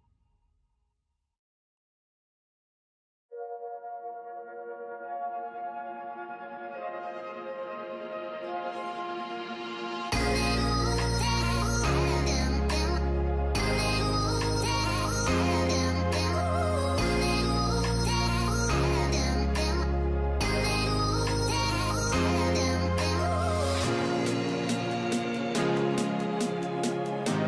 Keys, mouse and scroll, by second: 23.0 ctrl+click, 24.6 ctrl+e.